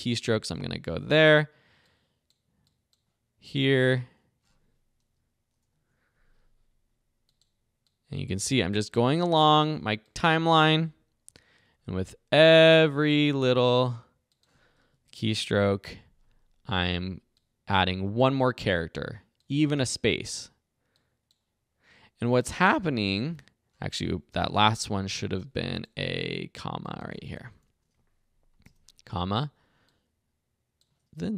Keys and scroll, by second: 0.5 e, 4.8-5.7 typing, 10.7 Right, 11.3 i, 14.9 Right, 15.6 o, 19.8 space, 27.6 Delete, 28.6 ,.